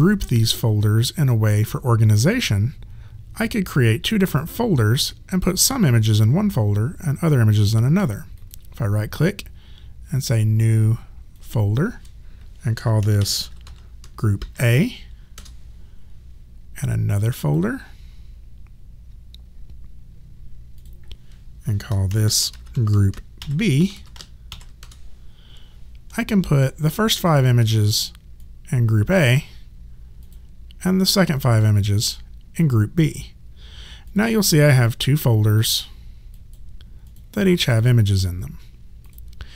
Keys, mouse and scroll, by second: 8.4 right click, 11.4 click, 12.8-14.4 typing, 15.3 Return, 15.3 KP_Enter, 16.8 right click, 20.8 click, 21.9-24.5 typing, 24.8 Return, 26.6 click, 27.3 shift+click, 31.4 shift+click, 32.2 click, 34.1 click.